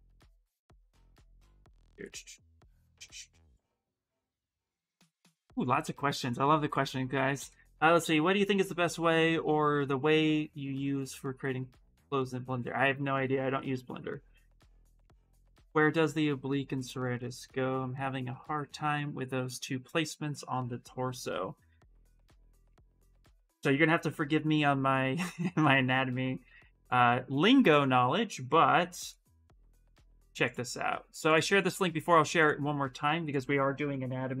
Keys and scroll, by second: 33.9 ctrl+v.